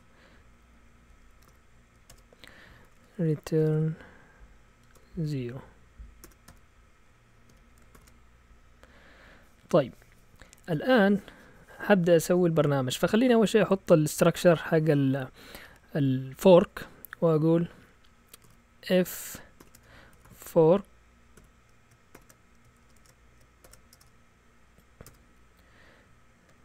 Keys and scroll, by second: 1.3 Up, 1.5 Right, 1.6-8.4 typing, 2.1 Tab, 18.4-23.6 typing, 23.9 Return, 25.0 Return.